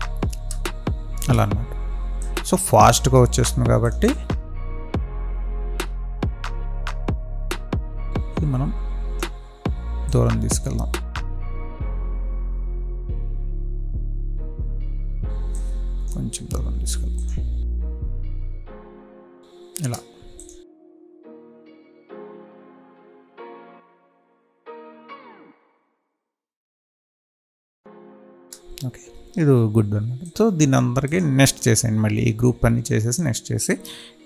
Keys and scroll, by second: 0.2 space, 18.4 space, 19.8 space, 20.8 space, 26.5 space, 27.1 space, 28.4 space.